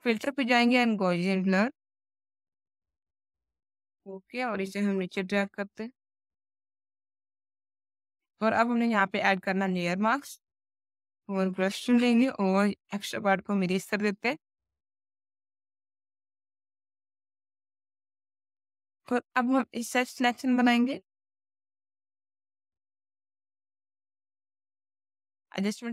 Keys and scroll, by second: 4.4 Down, 7.1 Down, 10.6 b, 16.3 alt+x, 16.8 alt+x, 17.6 alt+x, 18.1 space.